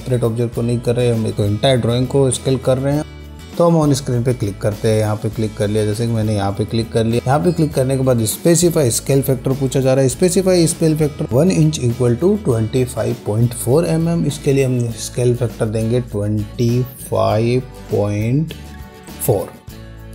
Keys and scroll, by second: 17.4 2, 18.7 5, 19.5 ..